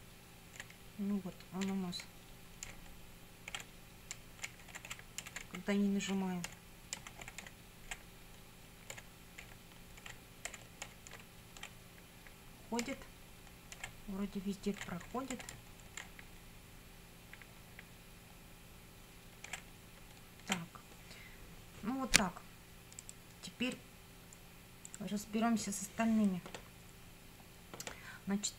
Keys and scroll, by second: 0.8 Left, 1.7 Up, 2.0 Left, 2.7 Down, 3.5 Left, 4.1 Up, 4.4 Left, 4.7 Down, 4.9 Left, 5.2 Up, 5.5 Left, 6.2 Up, 6.4 Left, 7.0 Right, 7.3 Up, 7.5 Right, 7.9 Up, 9.0 Left, 9.4 Up, 10.1 Left, 10.5 Up, 10.9 Left, 11.2 Down, 11.7 Left, 12.8 Right, 13.8 Up, 16.1 Right, 19.7 Down.